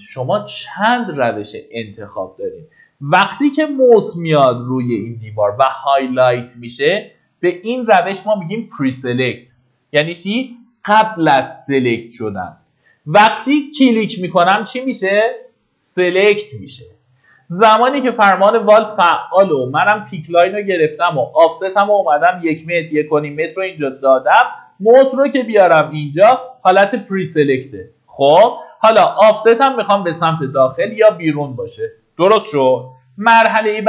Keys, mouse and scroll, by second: 13.6 click, 17.4-18.1 typing, 19.6 click, 22.7 KP_1, 26.7-27.2 scroll down 1.